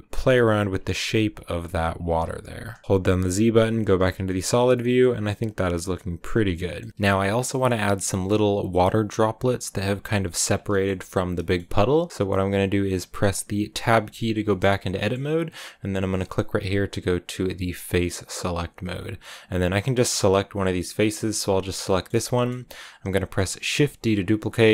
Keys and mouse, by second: 0.0-3.5 typing, 0.5 click, 1.9 click, 4.2 click, 4.9 click, 5.3 Tab, 5.5 click, 6.4 middle click, 6.8 middle click, 10.6 shift+middle click, 11.3 middle click, 11.5 click, 12.0 click, 13.8 Tab, 14.4 shift+click, 14.9 click, 20.9 click, 21.8 middle click, 22.2 shift+middle click, 23.8 shift+d.